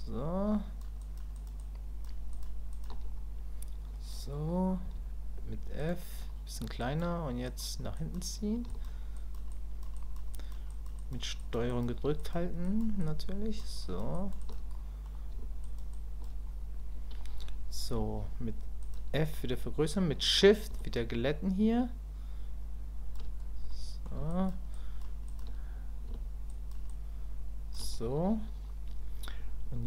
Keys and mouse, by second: 1.1 ctrl+click, 1.3 ctrl+click, 1.6 ctrl+click, 2.3 ctrl+click, 2.7 ctrl+click, 6.8 click, 7.5 click, 7.9 click, 8.7 ctrl+click, 9.2 ctrl+click, 9.5 ctrl+click, 9.9 ctrl+click, 10.3 ctrl+click, 10.7 ctrl+click, 11.0 ctrl+click, 11.4 ctrl+click, 11.7 ctrl+click, 12.2 ctrl+click, 12.6 ctrl+click, 13.0 ctrl+click, 13.8 ctrl+click, 14.1 ctrl+click, 14.4 ctrl+click, 14.7 middle click, 15.6 ctrl+click, 16.0 ctrl+click, 20.8-23.1 shift+drag, 23.7 middle click, 24.3 shift+middle click, 24.7 shift+middle click, 25.3 shift+middle click, 26.5 shift+middle click, 26.9 shift+middle click.